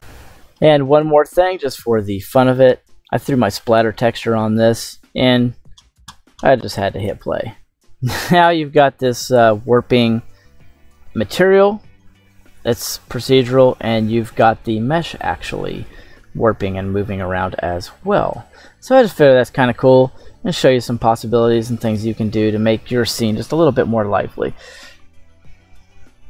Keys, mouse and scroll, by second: 0.6-1.1 middle drag, 1.4 scroll up 2, 2.0-2.4 scroll down 2, 2.7-3.1 shift+middle drag, 3.6 shift+middle click, 4.1 scroll up 2, 4.6-5.1 shift+middle drag, 6.9 click, 9.5-9.9 scroll down 2, 11.1-14.4 shift+middle drag, 15.9-16.7 shift+middle drag, 17.6 scroll up 2, 18.4 shift+middle click, 19.2 scroll up 1, 20.5 scroll down 3, 21.0-21.5 middle drag, 21.8 scroll down 1.